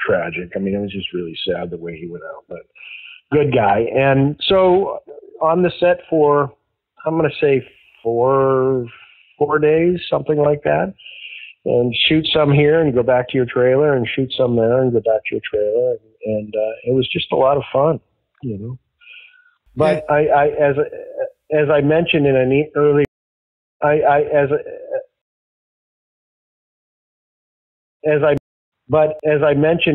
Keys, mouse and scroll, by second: 4.3 click, 5.6 click, 6.3 click, 7.4-8.5 drag, 9.3-12.9 drag, 13.5 click, 14.4 click, 15.3-16.5 drag, 16.9 click, 20.7 click, 21.6 click, 23.0 space, 23.6 click, 23.7 space, 24.3 click, 25.1 space, 26.5 click, 27.6 ctrl+shift+Delete, 27.9 space, 28.3 space, 28.5 click, 28.6 space.